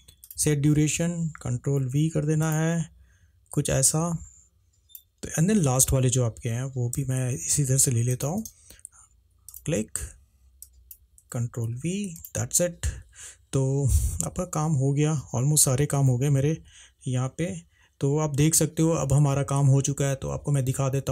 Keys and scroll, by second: 1.9 ctrl+v, 4.6 h, 7.1 v, 11.7 ctrl+v.